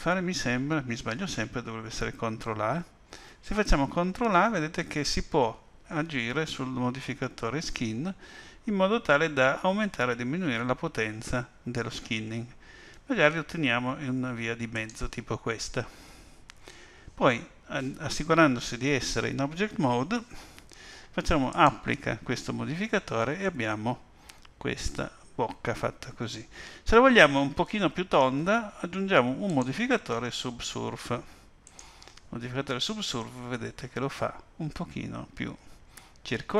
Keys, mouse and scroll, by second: 2.8 ctrl+a, 18.7 Tab, 21.5 click, 23.4 middle click, 29.5 click, 33.2 middle click.